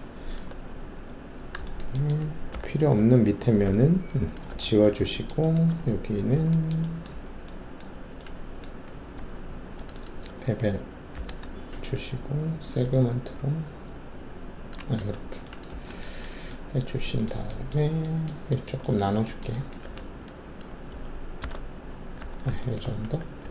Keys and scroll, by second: 2.5 alt+4, 3.6 alt+3, 4.5 ctrl+`, 5.6 alt+2, 9.1 alt+2, 11.1 shift+b, 15.7 ctrl+alt+`, 19.8 alt+3, 21.4 alt+t, 22.1 w, 23.3 w.